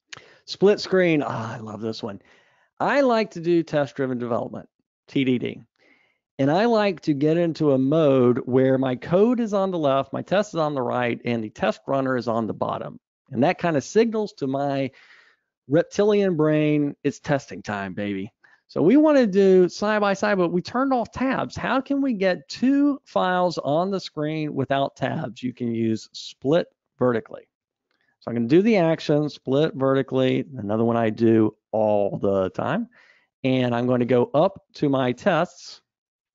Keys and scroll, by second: 30.3 ctrl+shift+super+a, 34.4 super+Up.